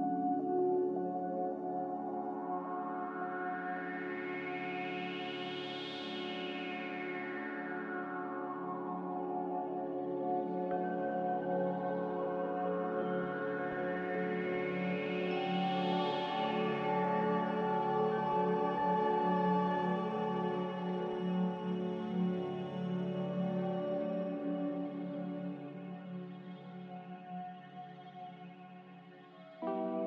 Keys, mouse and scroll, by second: 1.3-2.2 typing, 5.7 b, 19.5 g, 29.8 x.